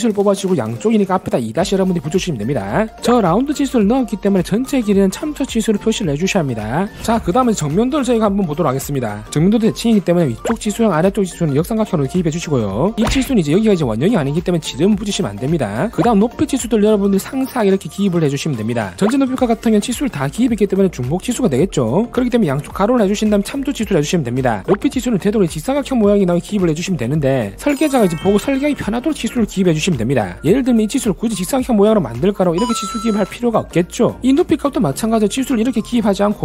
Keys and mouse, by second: 0.5 click, 16.4 click, 17.4 click, 18.2 click, 31.1 e, 31.3 right click, 31.4 click, 31.6 right click, 31.9 w, 32.0 right click, 32.3 click, 32.8 click, 33.3 click, 34.9 e, 36.0 right click, 36.3 click.